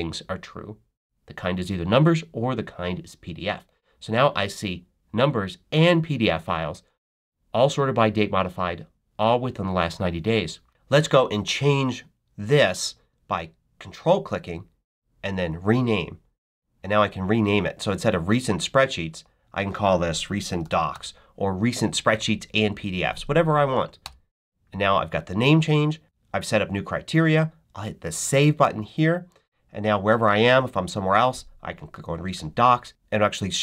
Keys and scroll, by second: 20.0-21.3 typing, 23.9 Return.